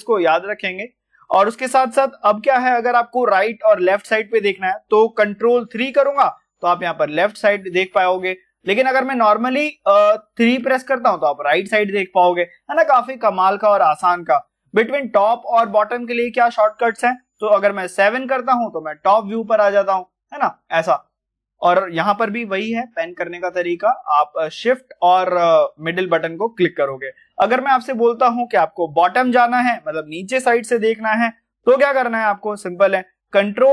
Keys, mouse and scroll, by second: 5.1 middle click, 19.6-20.2 scroll down 1, 20.2 scroll up 1, 20.7-22.6 scroll down 1, 23.2 shift+Num_Lock, 23.2 scroll down 1, 23.3-25.5 shift+middle drag, 25.5 scroll up 1, 33.3 ctrl+Num_Lock, 33.3-33.7 scroll up 1.